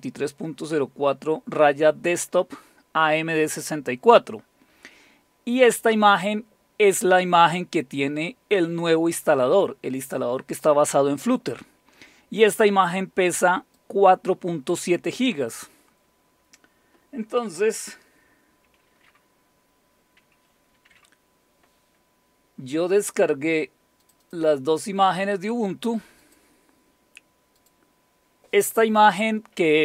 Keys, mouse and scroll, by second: 13.8-15.0 drag, 24.0 click, 24.2 click, 26.2 click, 27.6 click.